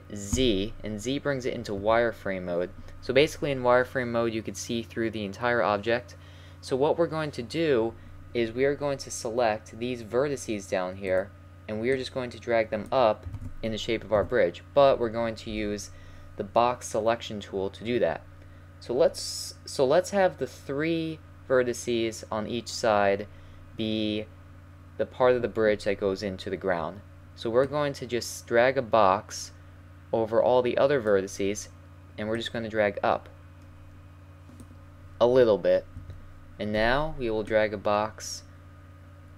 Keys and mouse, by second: 0.4 z, 1.8 a, 11.1-11.9 right drag, 11.9 click, 13.4 ctrl+z, 14.2 a, 15.5 b, 32.4 click, 36.0 a, 36.8 b.